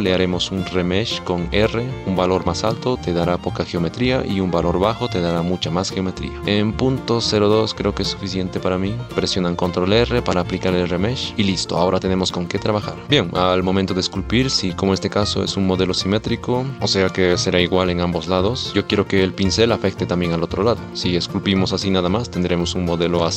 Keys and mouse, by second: 1.4 r, 3.2 ctrl+r, 9.3 ctrl+r, 11.3 shift+z, 11.5 click, 11.5 middle click, 12.0 middle click, 14.9 middle click, 15.9 middle click, 17.9 shift+middle click, 19.7 middle click, 21.2 middle click, 22.1 ctrl+z, 22.3 ctrl+z, 23.2 shift+middle click.